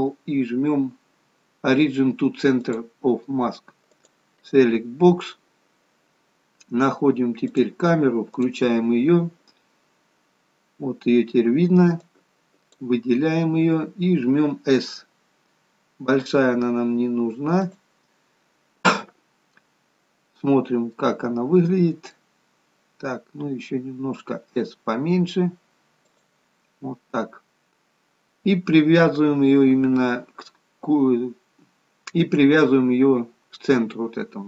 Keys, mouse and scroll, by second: 3.9 click, 5.5-7.0 scroll down 2, 7.5 click, 8.5 click, 9.1-9.8 scroll down 1, 9.8-11.4 scroll down 2, 11.4-12.0 scroll up 2, 12.0 click, 14.0-15.0 scroll down 1, 15.0 scroll down 1, 16.0 s, 18.4-19.1 scroll up 1, 20.6-23.4 scroll up 3, 21.0 middle click, 23.4 s, 26.6-28.0 scroll down 1.